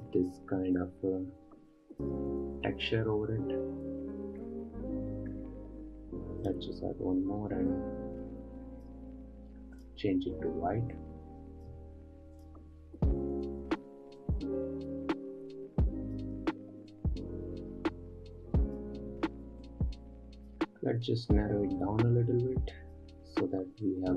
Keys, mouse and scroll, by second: 6.9-10.3 drag, 12.9 click, 13.4-14.7 scroll up 1, 14.7-24.1 drag.